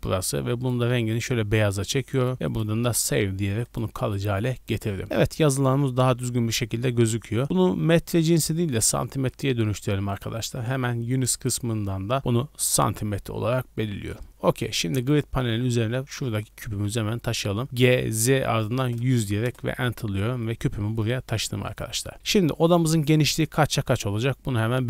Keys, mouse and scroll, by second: 9.3-13.8 drag, 13.8 middle click, 14.9-15.9 scroll down 1, 15.9 middle click, 15.9 scroll down 1, 16.7 g, 16.9 z, 18.6 KP_1, 18.8 KP_0, 19.4 KP_Enter, 20.4 middle click, 20.9-21.7 middle drag, 22.1 scroll up 1, 22.2-23.5 middle drag.